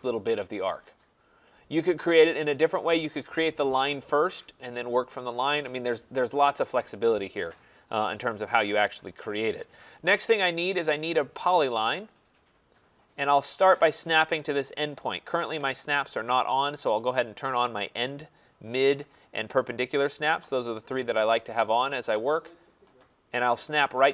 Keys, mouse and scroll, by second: 8.3 middle click, 8.4-11.7 scroll, 12.3 click, 15.0 click, 17.6 click, 18.9 click, 20.5 click.